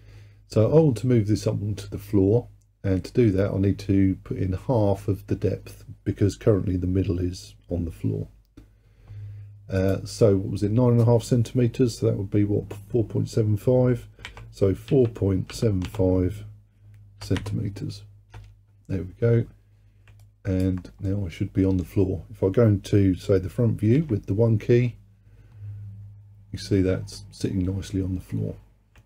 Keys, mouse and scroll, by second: 9.8-13.0 drag, 20.3 alt+click, 21.1-24.0 middle drag, 24.0 KP_1.